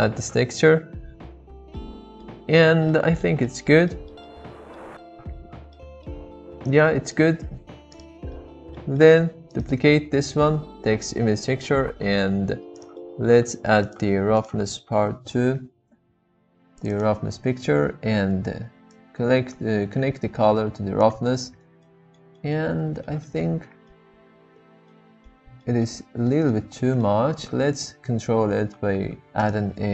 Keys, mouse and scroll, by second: 1.7-2.2 middle drag, 2.9-3.2 middle drag, 3.4-3.8 shift+middle drag, 3.9 middle drag, 4.5-4.8 shift+middle drag, 5.8 middle click, 7.5 g, 8.3 middle click, 9.0 middle click, 12.0 shift+d, 12.9 middle click, 14.4 click, 19.0-21.3 drag, 21.8-22.2 middle drag, 22.4 middle drag, 23.0 shift+middle click, 23.9-24.9 middle drag, 25.3 shift+middle click, 25.8 middle click, 26.5-27.1 middle drag, 29.1 shift+a.